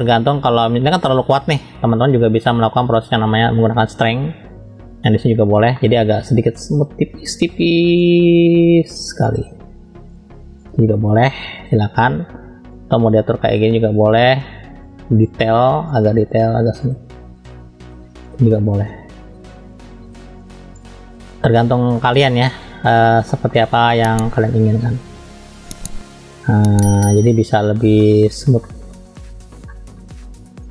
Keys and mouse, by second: 0.9-2.5 middle drag, 4.1-5.1 drag, 5.7-8.0 middle drag, 8.0 click, 9.3 click, 10.1 click, 11.1 click, 12.8-15.2 drag, 16.9 click, 17.3 click, 17.9 click, 18.6 click, 19.3 click, 20.1-21.9 drag, 21.9-23.3 middle drag, 23.5 middle click, 25.1 click, 25.4 click, 26.6 click, 26.9 click, 27.1 click, 28.0 middle click, 28.6 middle click, 29.7 middle click, 30.6 click.